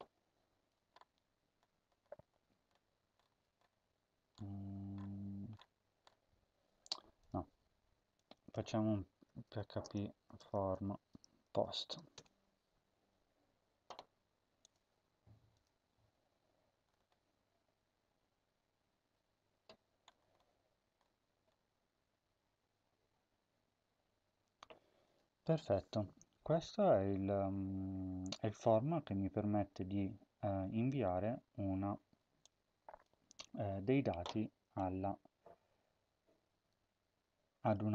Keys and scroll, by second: 8.8-12.3 typing, 33.3 ctrl+c.